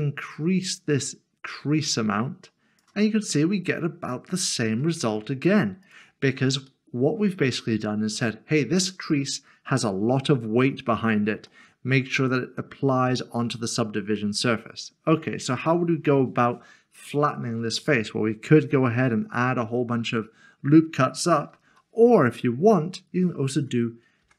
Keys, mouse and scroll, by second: 5.8 click, 6.9 middle click, 11.5 middle click, 12.3-14.2 scroll down 1, 14.2 middle click, 21.7 3, 22.0 click.